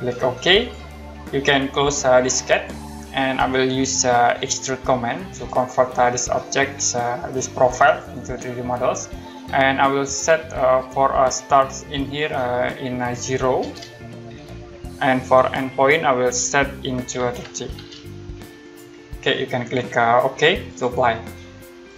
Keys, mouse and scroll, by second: 0.6 click, 2.5 click, 5.3 click, 7.8 click, 12.0 click, 14.4 KP_0, 15.2 click, 17.2-17.7 typing, 18.6 click, 20.7 click.